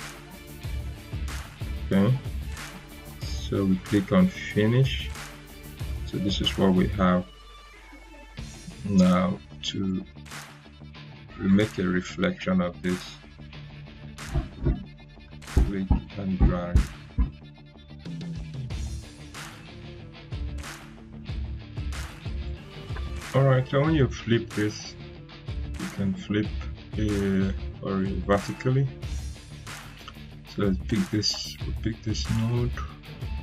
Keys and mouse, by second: 2.9 click, 7.6 click, 8.0 right click, 8.9-9.8 drag, 15.8 ctrl+right click, 23.9 click, 28.4 click, 33.2 click, 33.2-33.4 drag.